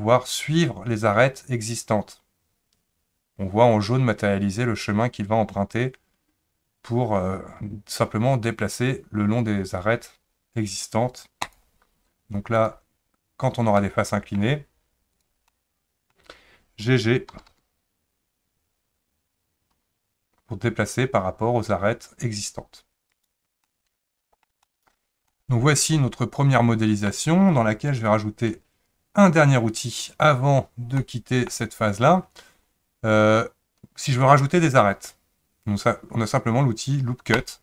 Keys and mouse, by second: 12.6 click, 13.8 middle click, 15.1 click, 15.5 middle click, 17.3 g, 23.6 middle click, 24.7 shift+middle click, 25.3-27.1 middle drag, 31.1 middle click, 37.3 click.